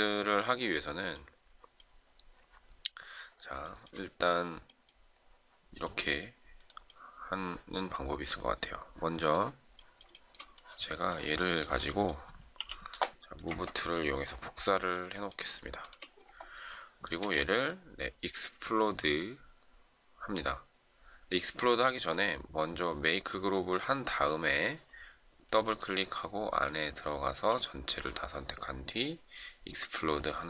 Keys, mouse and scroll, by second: 3.6 shift+middle click, 10.1 shift+middle click, 12.5 m, 13.4 ctrl+click, 14.2 shift+scroll down 1, 14.9 shift+middle click, 15.8 shift+click, 17.1 space, 27.0 ctrl+a.